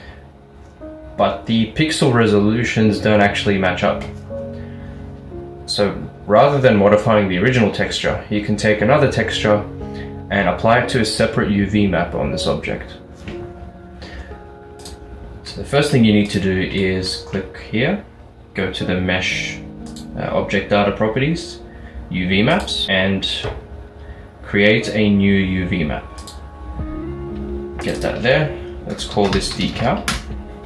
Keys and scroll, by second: 29.2-29.8 typing, 30.2 Return.